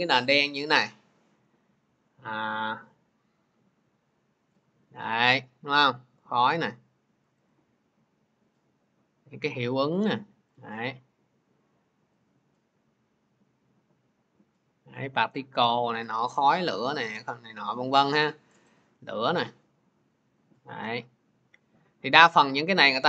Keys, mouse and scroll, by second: 0.7 click, 2.6 click, 2.8 click, 5.9 click, 7.2 click, 7.3 click, 10.5 click, 11.0-11.4 scroll, 12.2 click, 17.2 click, 18.4 click, 18.6 click, 22.2 click.